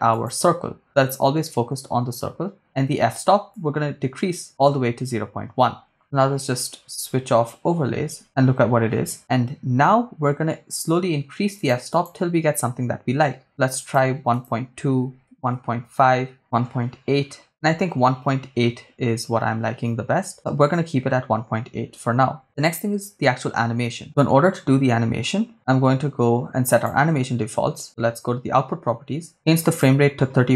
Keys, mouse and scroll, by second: 3.5 click, 6.0 click, 11.5-13.3 drag, 13.8-15.6 drag, 16.4 click, 26.7 click, 28.8-29.2 scroll up 2, 29.2-29.7 scroll down 2, 29.7-30.5 drag.